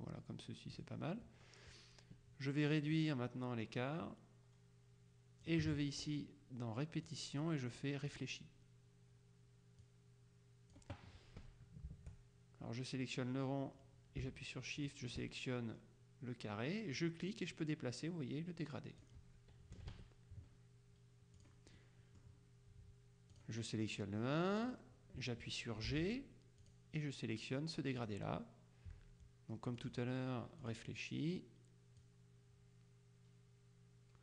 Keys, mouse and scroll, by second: 3.0-6.0 drag, 7.2 click, 8.2 click, 10.0 click, 14.9 shift+click, 17.1-19.6 drag, 19.8 KP_Subtract, 21.5 click, 23.4 click, 24.8 click, 26.0 g, 26.8 click, 28.1 click, 29.8 click, 30.7 click, 32.1 click.